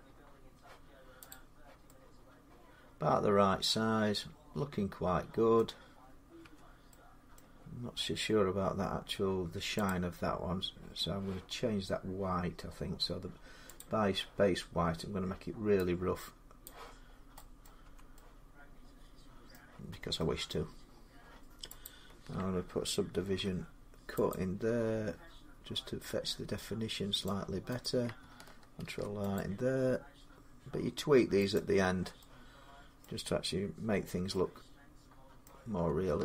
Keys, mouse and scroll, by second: 1.1 click, 3.5 middle click, 3.5 scroll, 5.4 middle click, 6.3 Tab, 7.2 middle click, 8.5-9.7 scroll down 3, 9.7 click, 9.9 middle click, 13.6 click, 16.5 click, 16.9-17.2 scroll down 4, 17.5 middle click, 17.7 Tab, 19.3 middle click, 19.6 Tab, 20.3-21.7 scroll, 20.3 middle click, 21.7 click, 23.0 ctrl+r, 24.2 click, 24.2 middle click, 27.1 click, 28.0 click, 28.7 ctrl+r, 29.2 click, 31.4 click, 32.9 middle click, 33.9 Tab, 35.3 middle click, 35.6 Tab, 36.1 Tab.